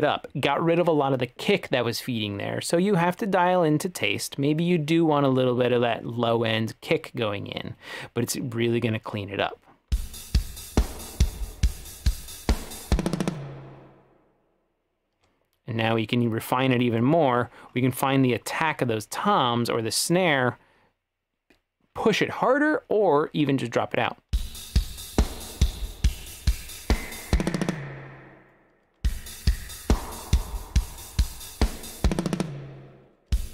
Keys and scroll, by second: 10.0 space, 15.2 space, 24.4 space, 28.8 space, 29.1 space, 33.1 space, 33.3 space.